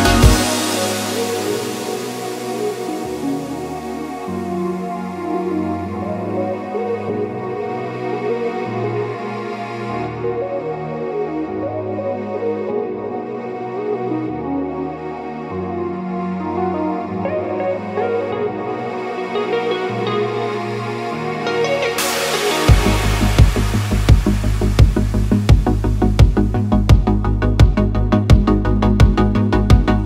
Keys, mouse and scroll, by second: 0.9-1.4 drag, 2.4 click, 3.3-3.6 middle drag, 3.9 KP_1, 4.7 shift+middle drag, 5.2 click, 6.1 click, 6.9-7.2 middle drag, 7.7-8.4 middle drag, 8.5 middle click, 9.3-10.8 middle drag, 11.4 middle click, 12.4 click, 12.7 middle click, 13.4 click, 14.0-14.7 drag, 15.1 click, 15.8 click, 16.5-16.8 middle drag, 17.9 KP_1, 18.2 a, 19.8 click, 20.9 click, 21.1 click, 21.6 click, 22.6 click, 23.1 click, 23.6 drag, 24.1 click, 24.4 drag, 24.6 click, 28.6 u, 29.4 Tab.